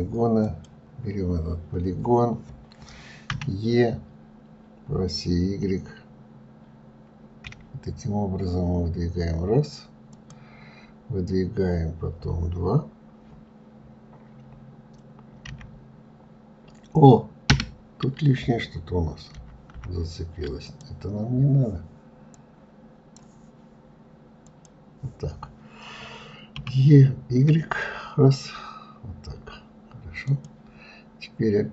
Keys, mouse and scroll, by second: 0.4 click, 1.2-1.9 scroll down 1, 1.9-2.9 scroll down 1, 3.3 e, 19.3 ctrl+z, 19.7 ctrl+z, 20.6-24.6 drag, 26.5 e.